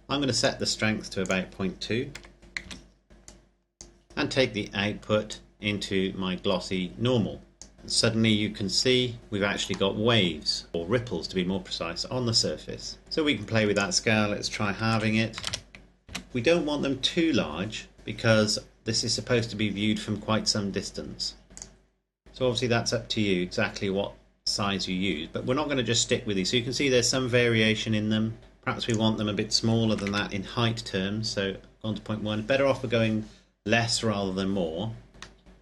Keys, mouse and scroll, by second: 2.4 KP_2, 2.7 KP_Enter, 3.3 click, 5.3 click, 9.2-10.2 scroll up 1, 10.3 shift+middle click, 13.9 click, 14.8 KP_1, 14.9 KP_5, 15.4 KP_0, 16.3 KP_Enter, 21.5-21.9 scroll up 1, 22.0 click, 22.2-24.2 scroll down 1, 29.0 click, 30.2 KP_Decimal, 30.5 KP_1, 30.8 KP_Enter, 35.5 middle click.